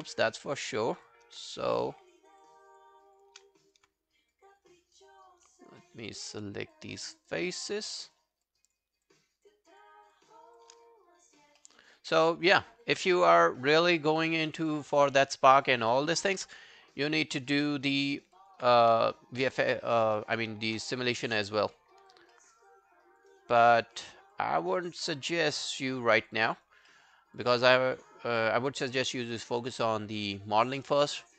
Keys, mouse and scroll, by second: 0.1 right click, 1.8 shift+click, 2.1 shift+click, 3.6 alt+click, 4.6-7.0 shift+click, 10.9 alt+click, 11.6 alt+middle click, 11.8 alt+right click, 15.1 alt+middle click, 15.3 alt+right click, 15.5 alt+click, 16.0 right click, 17.9 alt+middle click, 18.2 alt+right click, 18.4 alt+click, 18.8 q, 19.0 right click, 20.9 shift+click, 21.2 shift+click, 21.5 alt+click, 22.3 alt+middle click, 22.6 alt+right click, 22.8 alt+click, 23.3 alt+right click, 23.5 alt+click, 24.0 shift+click, 24.3 shift+click, 26.6 shift+click, 26.6 double click, 26.9 alt+middle click, 27.2 alt+scroll down 1, 27.4 alt+click, 27.8 right click, 30.2 alt+middle click, 30.7 alt+click, 31.1 alt+middle click, 31.3 alt+right click.